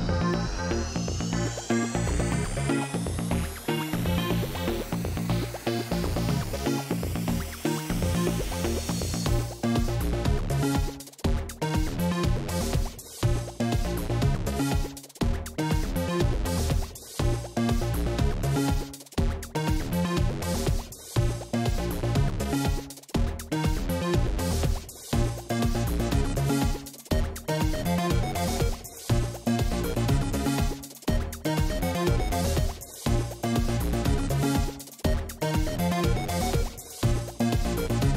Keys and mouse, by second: 9.7-11.9 drag, 12.9-14.5 drag, 14.5 a, 19.8 click, 21.6 a, 23.9 click, 26.0 click, 28.2-29.5 drag, 29.8-31.4 middle drag, 31.4 ctrl+z, 33.3 click, 33.6-37.0 middle drag, 37.0-38.1 drag.